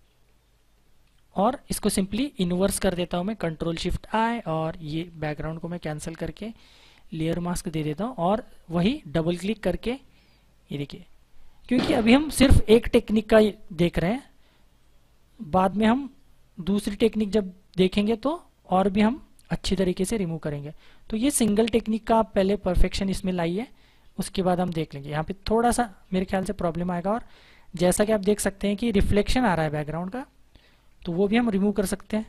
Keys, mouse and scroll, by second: 3.2 ctrl+shift+], 5.4 click, 9.1 click, 11.8-12.4 typing, 14.7 click, 26.7-27.5 scroll down 1, 27.5 space, 27.8 click, 28.0 space, 29.2-30.6 typing, 31.4 click.